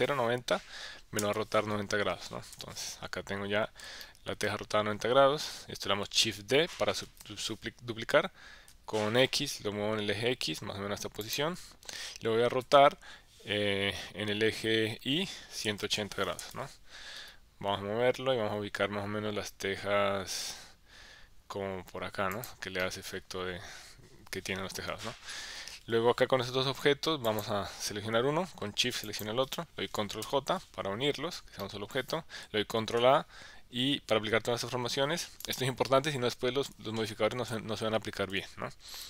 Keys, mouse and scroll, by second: 1.2 KP_Enter, 2.5 KP_1, 4.0 shift+middle click, 7.1 shift+d, 8.7 x, 11.2 click, 12.6 r, 15.0 y, 15.6 KP_1, 15.8 KP_8, 16.0 KP_0, 16.4 KP_Enter, 17.2 g, 22.3 click, 22.8-24.2 middle drag, 24.7 KP_1, 27.3 click, 29.2 shift+click, 30.2 ctrl+j, 31.6 middle click, 32.8 ctrl+a, 36.6 KP_1, 37.5 KP_3, 38.3 KP_1.